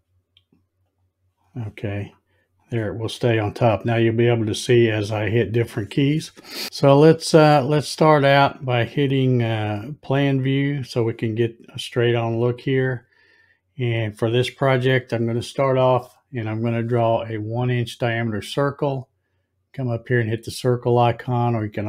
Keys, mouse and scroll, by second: 2.0 click, 10.4 click, 21.2 click.